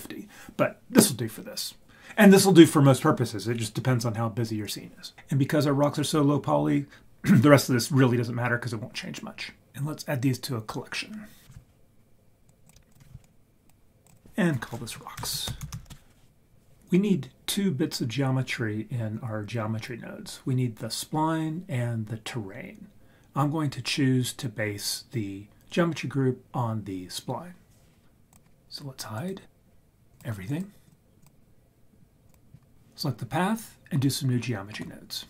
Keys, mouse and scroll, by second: 11.4 shift+click, 11.4 scroll down 2, 11.6 right click, 12.5 scroll down 1, 12.6 drag, 12.9 shift+click, 13.2 click, 14.0-15.9 drag, 28.3 click, 29.1 click, 30.1 click, 30.8 click, 32.3 click.